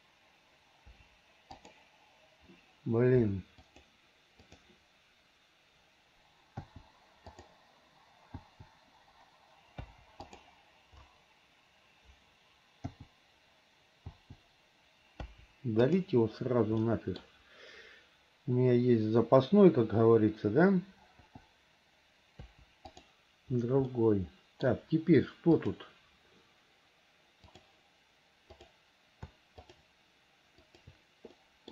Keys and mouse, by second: 1.1 Delete, 1.7 click, 3.8-6.9 drag, 8.6 l, 10.0 Delete, 13.1 l, 14.3 l, 15.3 Delete, 17.0 click, 21.5 l, 22.5 Delete, 24.1 middle click, 25.7 click, 27.8 click, 28.7 click, 30.8 shift+click, 31.5 middle click.